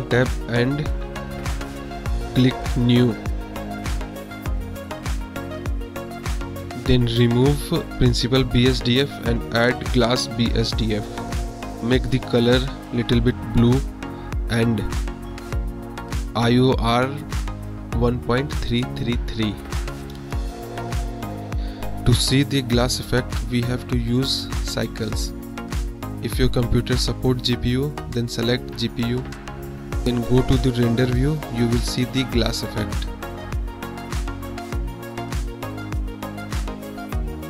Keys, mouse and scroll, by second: 0.7-1.6 middle drag, 2.6 click, 4.4 KP_Decimal, 5.4 click, 5.9 click, 6.4 click, 6.9 click, 8.0 shift+a, 10.8-11.5 drag, 11.5 click, 15.3 click, 17.2 click, 20.7-22.7 drag, 21.5 KP_3, 23.1-23.5 middle drag, 25.6-26.6 drag, 27.4-27.9 drag, 31.5-32.0 middle drag, 32.4 middle drag, 33.0-33.3 middle drag, 34.0-34.9 middle drag.